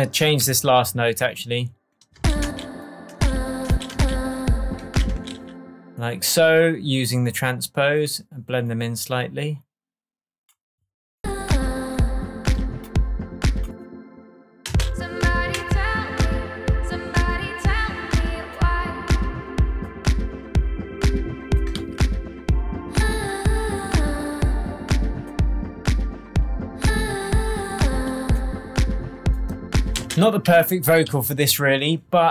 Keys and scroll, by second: 0.4 super+e, 2.1 space, 5.0 space, 14.6 space, 15.5 shift+Tab, 21.7 super+z, 29.9 space, 30.8 super+space, 31.0 super+s.